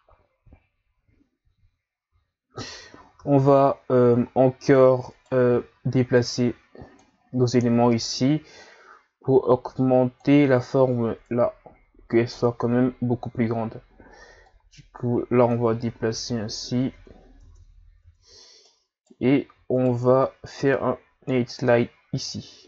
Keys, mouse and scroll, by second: 1.5 z, 2.2 z, 2.7 Tab, 3.2 Tab, 4.0 z, 5.2 right click, 5.5 b, 7.6 z, 8.6 click, 14.5 click, 15.6 Tab, 16.9 Tab, 17.4 Tab, 18.0 Tab, 18.7 right click, 19.7 shift+right click, 20.6 ctrl+e.